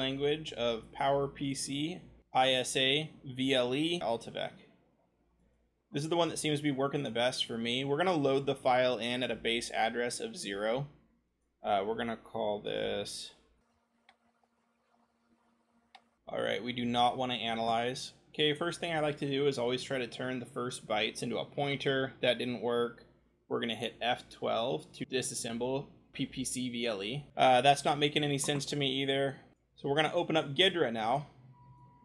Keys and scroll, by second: 1.2 scroll, 12.8-14.1 typing, 21.6 c, 24.5 F12, 30.6-32.0 scroll.